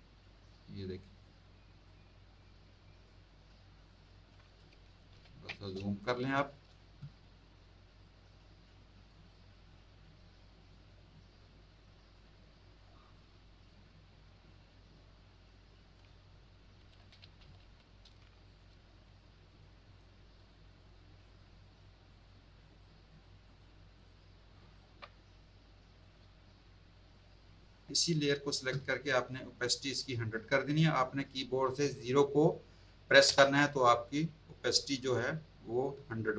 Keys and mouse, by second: 0.9 click, 1.8 click, 3.8 click, 5.1 ctrl++, 5.7 space, 6.0 click, 8.0 click, 13.1 click, 14.4 click, 18.4 click, 19.0 shift+click, 20.3 shift+click, 21.2 shift+click, 23.9 shift+click, 24.7 shift+click, 26.0 click, 27.1 shift+click, 33.2 KP_0, 36.2 z.